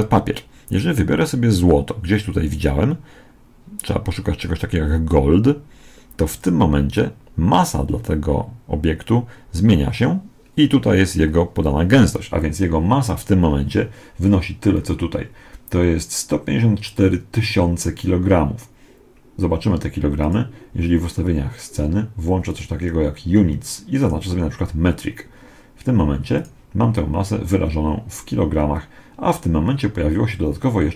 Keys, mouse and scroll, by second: 20.1-21.9 drag, 22.4-25.7 drag, 26.3-28.0 drag.